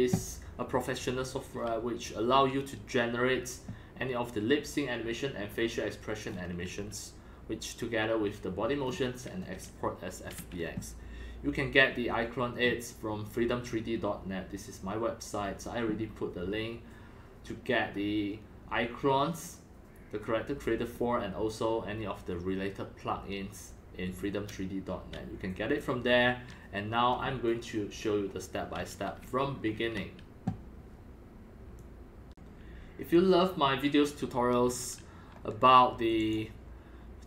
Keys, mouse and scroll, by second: 6.2-7.2 scroll down 10, 6.8-7.2 middle drag, 7.2 scroll, 8.8-9.4 scroll up 7, 9.6 scroll, 13.7 scroll, 31.7-34.6 drag, 34.6 scroll down 4, 34.7 middle click, 36.2 click.